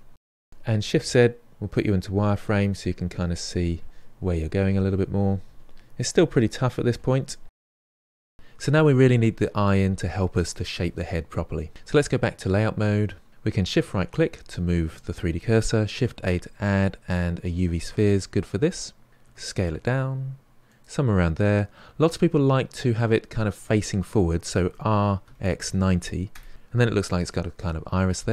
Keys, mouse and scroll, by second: 0.0 f, 0.2-4.3 drag, 0.5-2.8 Left, 2.9 Left, 3.2-3.8 Left, 4.3 KP_1, 4.6 shift+z, 4.7-6.6 drag, 6.6 shift+z, 6.7 click, 8.2 shift+z, 13.0 click, 13.9 shift+right click, 16.0 shift+a, 19.3 s, 24.6 r, 26.2 scroll down 1.